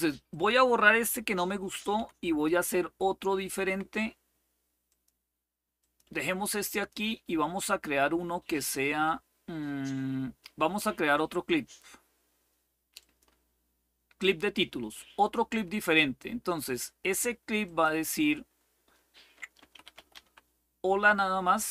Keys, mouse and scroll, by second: 0.0 click, 1.7 Delete, 4.6 click, 5.5 click, 6.4 click, 8.6 right click, 12.7 click, 17.3 click, 19.1-20.4 typing.